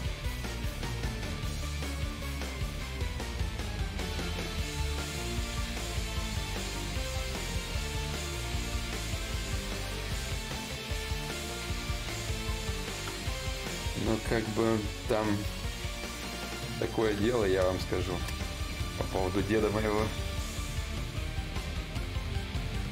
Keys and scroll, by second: 1.3 ctrl+z.